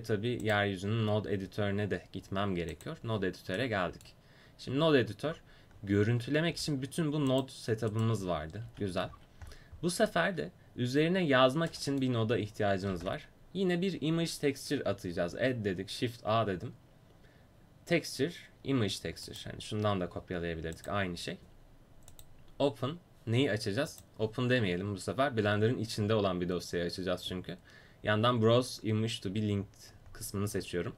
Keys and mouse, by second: 0.5-6.5 drag, 6.5 g, 7.9 click, 8.7 a, 9.8 middle click, 13.0 shift+a, 22.1 click, 24.0-27.8 drag.